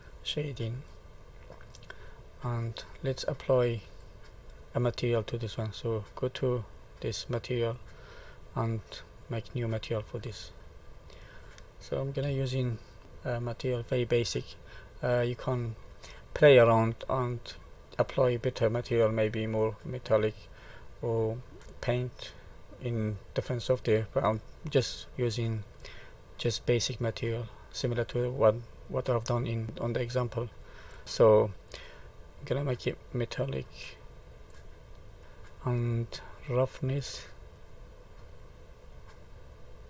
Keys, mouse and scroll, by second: 0.8 middle click, 2.0-2.4 scroll up 2, 2.6 middle click, 4.0 click, 7.4 click, 9.4 click, 10.6 middle click, 12.6 shift+middle click, 13.0 shift+middle click, 13.0-13.3 scroll up 2, 13.3 middle click, 19.5 middle click, 22.9 middle click, 25.1 shift+middle click, 25.5 click, 32.4 click, 35.2 scroll down 4, 37.0 click.